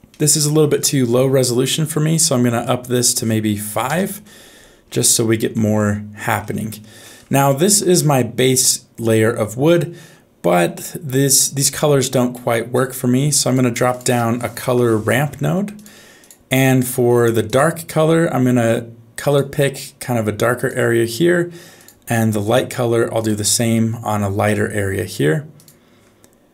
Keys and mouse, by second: 0.1 middle click, 1.7 middle click, 2.6-3.9 drag, 5.5 middle click, 7.5 shift+middle click, 8.0 middle click, 9.7 middle click, 12.3 middle click, 13.4 click, 13.8 shift+a, 16.6 middle click, 17.4 click, 22.5 click.